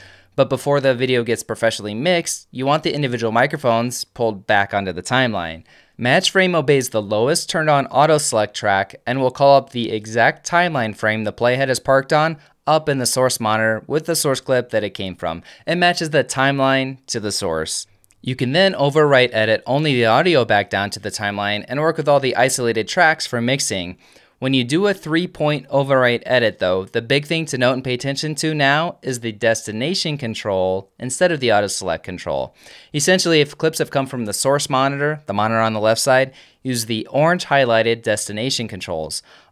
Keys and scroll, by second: 4.8 F10, 9.7 f.